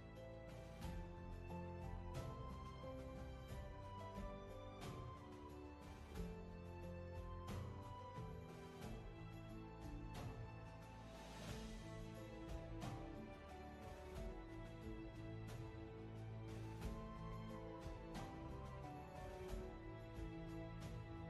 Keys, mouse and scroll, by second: 10.0 ctrl+z, 14.4 ctrl+z, 17.6-18.3 scroll down 1, 18.3 space, 19.6 space.